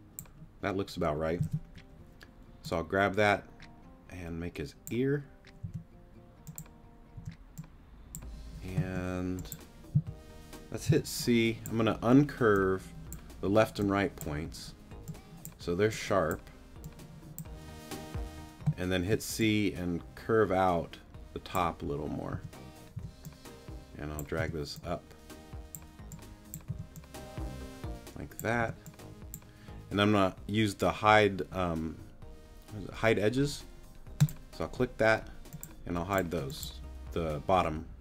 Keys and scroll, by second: 2.4 super+z, 5.6 t, 7.1 t, 8.8 t, 9.9 c, 19.0 c, 22.3 t, 24.4 t, 26.7 t, 28.6 t.